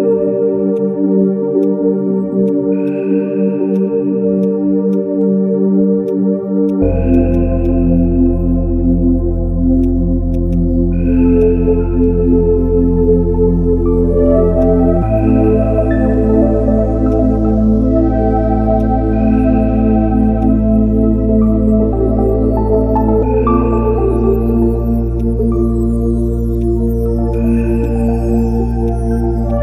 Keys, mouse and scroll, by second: 3.5 ctrl+z, 4.9 shift+click, 7.3 double click, 10.3 right click, 11.0 right click, 11.4 ctrl+shift+click, 12.7 ctrl+shift+space, 13.8 ctrl+z, 14.6 ctrl+shift+click, 15.4 ctrl+shift+space, 16.0 ctrl+z, 17.1 ctrl+shift+click, 18.2 ctrl+z, 18.8 ctrl+shift+click, 19.3 ctrl+z, 19.3 ctrl+shift+click, 20.4 ctrl+shift+click, 21.6 ctrl+shift+space, 26.6 shift+click, 27.8 shift+click, 29.5 shift+click.